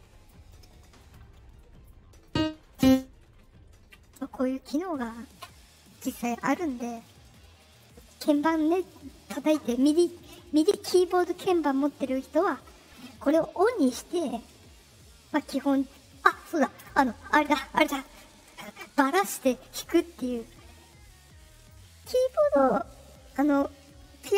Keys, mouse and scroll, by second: 0.9 right click, 1.5 right click, 2.2 click, 2.7 click, 4.0 middle click, 4.0-4.5 scroll, 6.1 right click, 16.8 click, 19.0 middle click, 19.0 scroll, 19.7 middle click, 19.7 scroll, 21.5 click, 22.0 click.